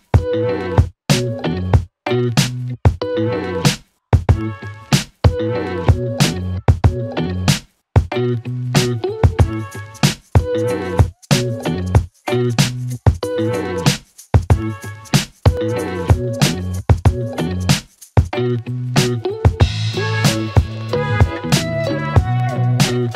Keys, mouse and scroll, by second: 2.3 Return, 3.3 click, 4.2 Return, 5.1 click, 7.3 Return, 8.6-9.9 click, 10.9 space, 13.8 space, 14.9-17.0 click, 20.4 space.